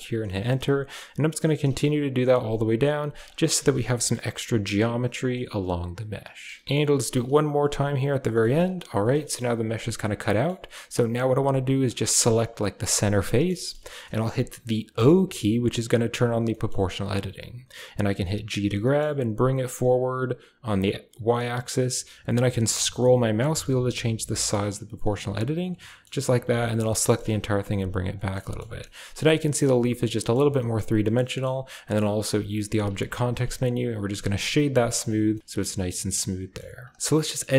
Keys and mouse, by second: 3.2-4.2 typing, 3.9 shift+click, 6.7 k, 9.1 click, 9.7 shift+click, 10.2 shift+click, 11.7 click, 13.1 shift+click, 13.5 shift+click, 13.6 shift+middle click, 14.8 o, 16.4 click, 18.4 g, 25.8 click, 26.0 a, 26.1 a, 26.5 click, 26.8 g, 27.9 typing, 28.2 click, 28.5 Tab, 28.7-29.0 drag, 29.0 Tab, 29.3 click, 29.5 a, 29.8 a, 30.0 click, 30.2 Tab, 30.4 drag, 30.8 click, 31.1 middle click, 31.7 middle click, 32.1 w, 34.5 drag, 35.0 a, 35.3 click, 35.4 middle drag, 36.1-36.5 middle drag, 36.7 click, 37.1 middle click.